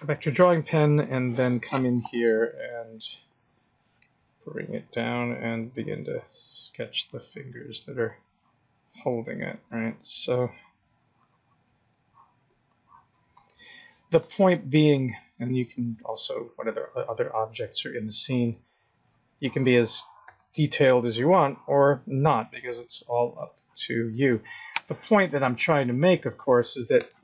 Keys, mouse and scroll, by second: 5.6 click, 7.7 click, 8.0 click, 10.4 click, 12.0 click, 12.7 click, 13.4 click, 15.4 click, 15.9 click, 18.1 click, 18.8 click, 20.9 click, 22.6 click, 25.7-26.2 scroll down 7.